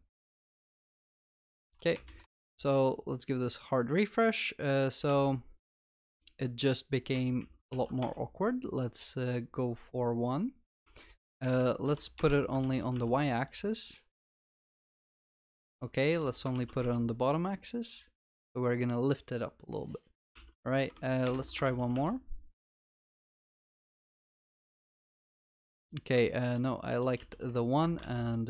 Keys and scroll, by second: 7.8 ctrl+s, 10.9 ctrl+s, 12.7 ctrl+s, 15.7 ctrl+s, 20.4 ctrl+s, 21.7 ctrl+s, 25.7 ctrl+s, 26.6 ctrl+z, 27.2 ctrl+z.